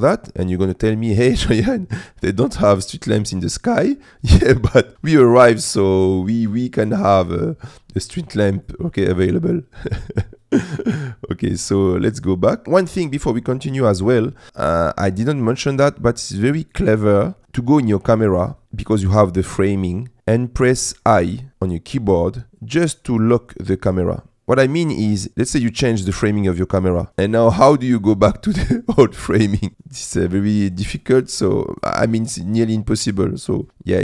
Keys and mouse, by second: 4.9 click, 6.5 click, 10.0 click, 12.6 KP_0, 14.8 click, 15.2 click, 25.3 ctrl+", 29.4-32.3 middle drag, 33.7 click.